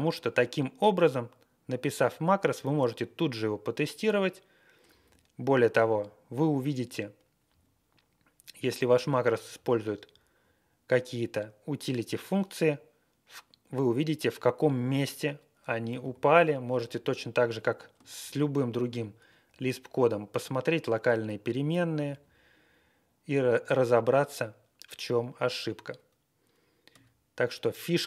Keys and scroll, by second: 4.8 Up, 5.0 Up, 5.6 Right, 5.9 Right, 5.9 Right, 5.9 Right, 7.5 Down, 8.9 Up, 9.1 Up, 9.5 Down, 10.0 Right, 10.3 Right, 10.3 Right, 16.0 t, 16.7 Down, 16.9 Down, 18.3 ctrl+l, 19.4-19.9 Right, 21.8 Up, 22.1 Up, 26.9 q.